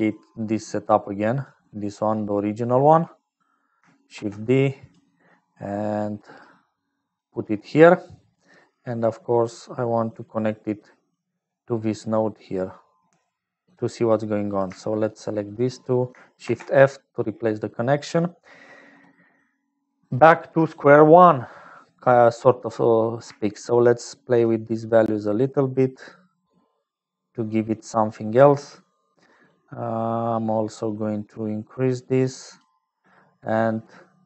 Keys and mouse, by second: 0.0-34.2 typing, 0.1 click, 1.4 click, 2.0 click, 2.4 click, 5.6-7.3 drag, 7.7 click, 10.1 click, 12.7-14.1 drag, 14.4 click, 15.5 shift+click, 17.7 click, 23.9-27.4 shift+drag, 29.6-32.9 drag.